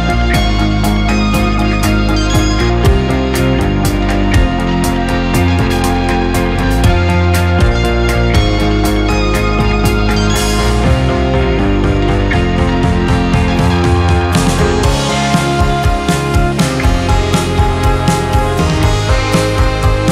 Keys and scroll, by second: 0.7-4.7 typing.